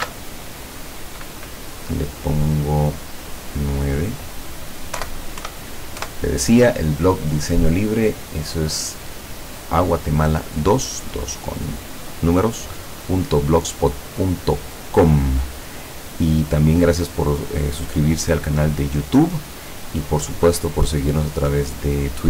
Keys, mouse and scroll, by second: 0.0 ctrl+shift+s, 3.5 click, 5.0 Delete, 5.5 KP_9, 6.3 KP_Enter.